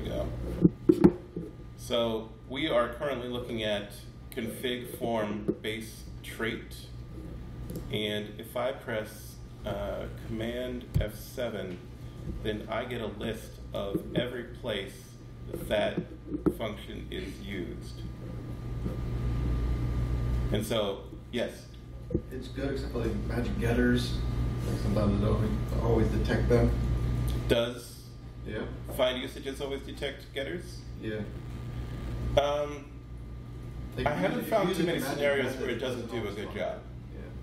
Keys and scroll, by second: 10.8 alt+F7.